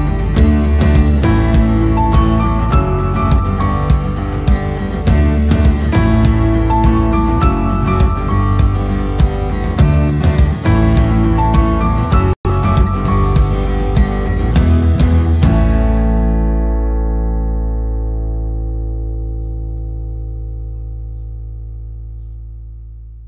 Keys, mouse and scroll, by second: 0.0 click, 0.8 click, 1.7 middle click, 2.5 click, 2.9 click, 3.2 middle click, 4.5 click, 6.1 click, 6.6 click, 7.0 scroll up 4, 7.8 click, 9.1 click, 9.4 click, 9.6-10.4 scroll down 4, 9.7 middle click, 10.7 click, 10.8 middle click, 11.3 click, 11.7 click, 12.3 click, 12.6 click, 13.1 click, 14.6 click, 14.6 click, 14.8 click, 15.0 click, 15.2 click, 15.5 middle click, 15.5 scroll up 1, 15.8 click, 17.1 click, 17.4 click, 18.2 click, 18.6 click, 18.9 click, 20.1-20.5 scroll down 3, 20.6 click, 20.7 click, 21.4 click, 22.1 click, 22.6 click, 22.9 click.